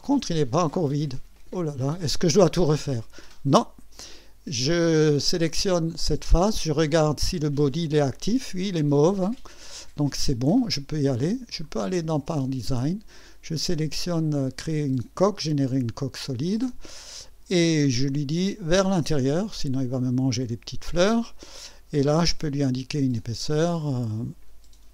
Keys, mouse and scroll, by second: 6.0 click, 11.6 click, 12.3 click, 15.7 click, 19.5 click, 23.4 click.